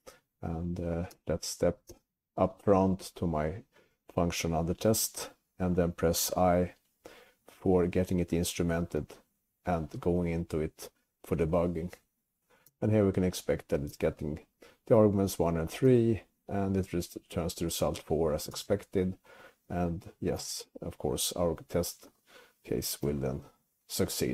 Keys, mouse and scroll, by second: 1.2 space, 2.0 space, 9.1 i, 12.8 space, 14.0 space, 16.0 space, 18.6 space, 20.6 space, 23.2 c.